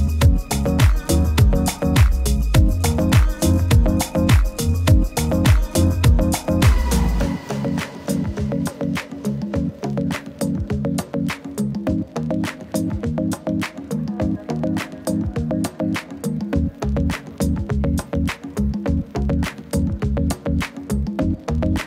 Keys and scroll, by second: 5.5 super+-, 5.7 super+-, 5.7 super++, 10.1 alt+z, 12.0 alt+z, 13.4 super+-, 13.6 super+-, 13.9 super+-, 18.0 super+d, 20.4 super+s.